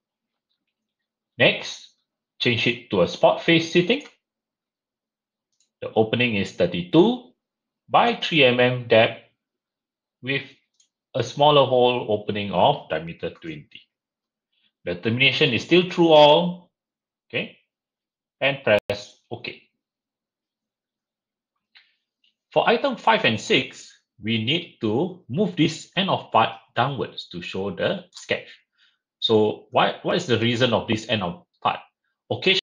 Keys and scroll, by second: 6.9 typing, 8.5 typing, 13.3 typing.